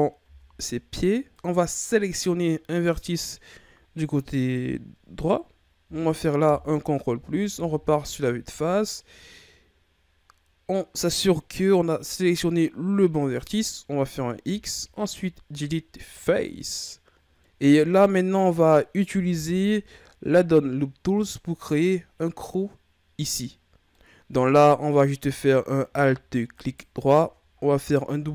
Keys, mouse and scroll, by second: 0.2 Tab, 1.3 Right, 6.5 ctrl+KP_Add, 7.5 KP_1, 14.4 x, 17.2 scroll down 3, 17.7-19.3 middle drag, 19.3 KP_1, 21.0 ctrl+scroll up 1, 21.2 ctrl+middle click, 21.9-22.3 scroll down 1, 22.3-25.5 middle drag, 25.5-26.6 scroll up 1, 26.6 alt+right click, 28.2 w.